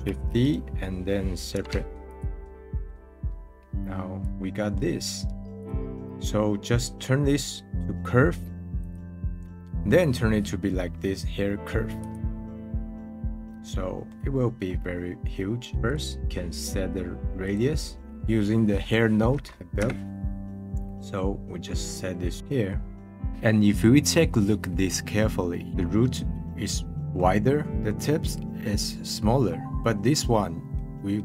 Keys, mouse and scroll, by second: 1.5 p, 2.7-4.2 middle drag, 4.2 click, 4.4-5.6 middle drag, 5.6 click, 7.7 right click, 9.4-12.8 middle drag, 12.8 scroll down 2, 13.5-15.7 middle drag, 15.8-18.0 drag, 20.9-21.4 scroll up 10, 21.7-23.3 middle drag, 23.3 click, 24.8-26.3 middle drag, 26.3-27.0 scroll up 1, 27.0-27.6 middle drag, 27.6 scroll up 2, 27.8 middle click, 29.5-30.7 middle drag.